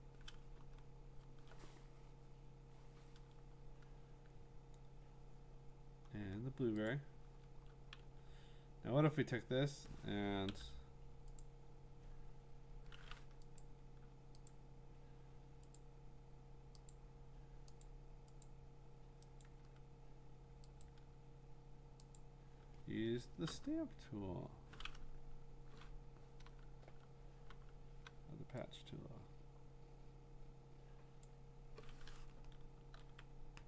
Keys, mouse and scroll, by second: 0.6-1.2 scroll, 5.9-6.2 scroll, 6.9 click, 8.0 v, 10.5 i, 11.4 click, 13.6 click, 14.5 click, 15.8 click, 16.9 click, 17.8 click, 18.4 click, 19.4 click, 20.8 click, 22.2 click, 23.5 j, 26.8-27.5 typing, 31.2 click, 32.8 ctrl+d.